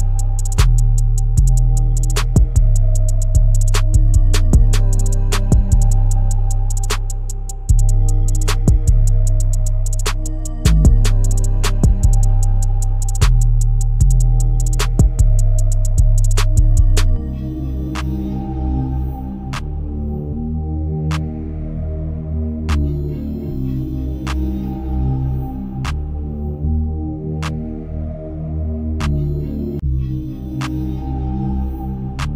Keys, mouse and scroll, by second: 0.4 alt+click, 1.1-2.0 scroll up 1, 2.0-3.6 shift+middle drag, 3.6 click, 4.3 alt+click, 5.2 KP_1, 6.4 shift+w, 8.9 shift+d, 11.3 p, 15.0 Tab, 15.7-18.7 drag, 19.5 click, 20.2 click, 21.4-23.7 drag, 23.7-24.1 scroll down 3, 24.1-25.1 shift+middle drag, 25.1-25.7 scroll up 1, 25.7-26.1 scroll up 2, 26.1-26.7 shift+middle drag, 26.7 Tab, 28.6 click, 29.5 a.